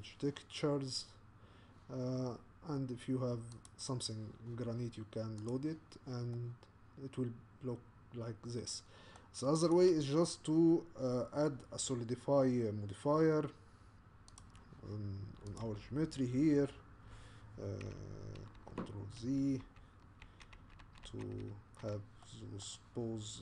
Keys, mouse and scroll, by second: 1.0-1.8 scroll down 1, 1.8-2.3 scroll down 1, 5.5 click, 6.4-9.3 middle drag, 9.7 click, 15.6 click, 18.6 ctrl+z, 19.2 ctrl+z, 19.6 ctrl+z, 20.3 ctrl+z, 20.6 ctrl+z, 20.8 ctrl+z, 21.1 ctrl+z, 22.2-23.4 middle drag.